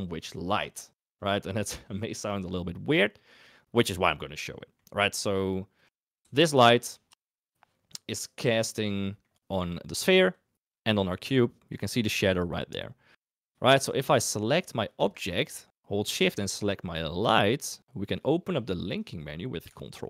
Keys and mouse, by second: 2.9 click, 4.2 middle click, 5.7 click, 6.2 g, 8.2 middle click, 9.0 click, 13.5 shift+click, 14.9 click, 17.2 shift+click.